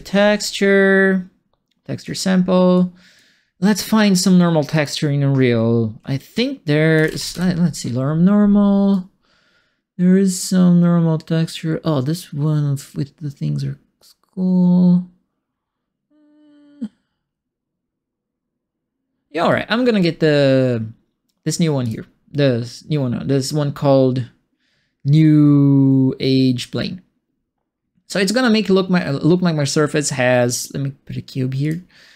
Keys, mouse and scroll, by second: 0.0-0.2 typing, 1.9 click, 2.7 click, 4.7 click, 6.7-7.8 typing, 8.9-19.4 right drag, 21.8 click, 31.6 click.